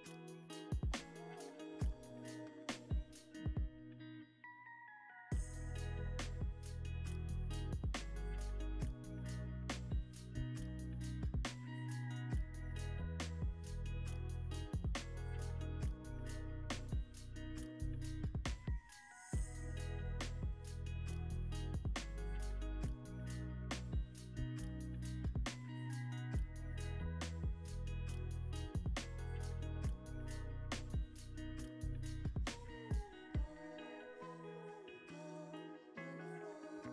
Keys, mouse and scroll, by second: 3.8-5.6 drag, 3.8 a, 6.2 m, 8.4 a, 10.8 shift+s, 12.0 Escape, 13.3 shift+d, 16.3 l, 17.4 m, 19.9-20.8 typing, 20.5 Return, 25.1 scroll up 1, 25.7 s, 27.0 ctrl+z, 27.8 right click, 29.1 s, 30.2 g, 30.5 x, 31.5-35.8 ctrl+drag, 32.0 ctrl+j, 33.8 scroll down 1, 34.9 s, 35.6 g.